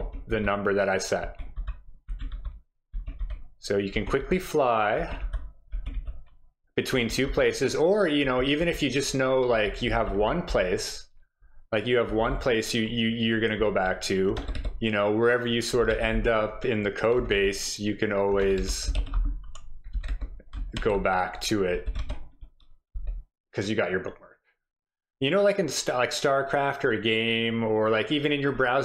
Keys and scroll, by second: 0.0-5.9 typing, 7.3 typing, 8.6-10.5 typing, 11.8-12.8 typing, 14.3-20.8 typing, 22.0-22.9 typing.